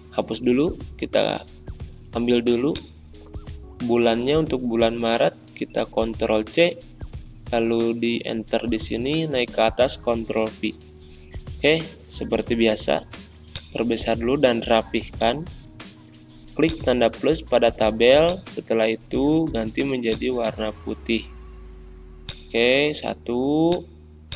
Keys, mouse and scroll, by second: 0.3 BackSpace, 0.9 alt+Tab, 2.6-4.9 drag, 4.9 c, 5.6 alt+Tab, 7.2 Return, 8.3 Up, 8.9 ctrl+v, 10.9 Delete, 13.5-24.3 drag.